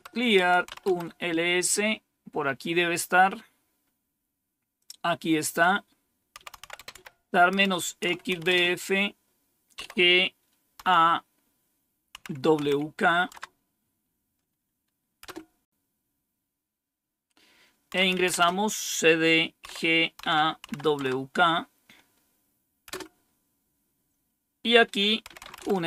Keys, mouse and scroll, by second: 0.0-0.8 typing, 4.7 click, 6.1-10.7 typing, 12.0-12.5 typing, 13.2 Tab, 15.1 Return, 17.6-18.3 typing, 19.6-21.0 typing, 22.8 typing, 24.9-25.8 typing.